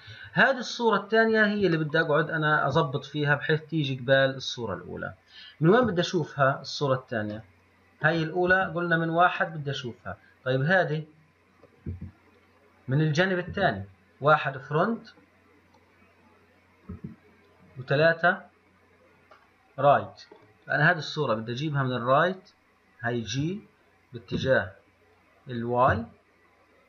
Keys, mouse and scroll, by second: 0.9 scroll up 2, 2.2-5.9 shift+middle drag, 6.1 KP_3, 7.1-7.7 scroll down 3, 7.7-8.7 middle drag, 8.7 KP_1, 9.8-12.1 middle drag, 12.1 KP_3, 13.7 KP_1, 13.8 middle click, 17.2 KP_3, 19.0-19.6 scroll down 1, 19.6-20.9 middle drag, 20.9 click, 23.5 g.